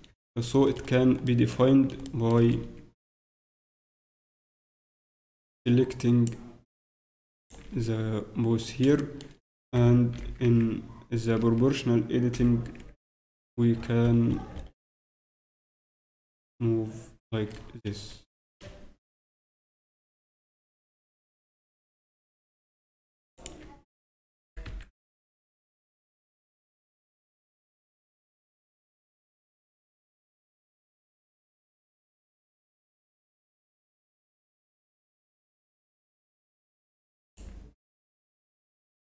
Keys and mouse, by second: 2.5 a, 4.8 b, 7.7 b, 9.7 o, 10.1 g, 13.3 g, 24.4 r, 26.7 z, 27.0 Tab, 30.2 Tab, 30.7 z, 34.3 o, 35.6 a, 36.4 b, 38.3 r.